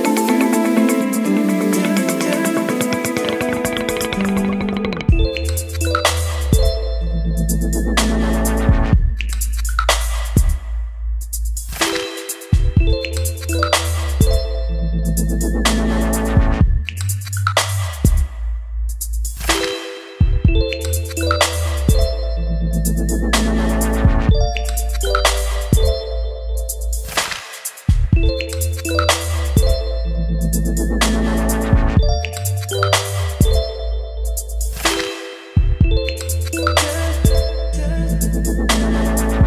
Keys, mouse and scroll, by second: 2.2 ctrl+s, 2.8-5.6 drag, 8.5-12.6 drag, 16.2 click, 19.2 ctrl+r, 20.6-27.7 drag, 27.7 Return, 28.8 ctrl+r, 29.2 Return, 30.6-34.8 drag, 34.7-35.8 typing, 38.0 ctrl+z, 39.2-39.4 drag.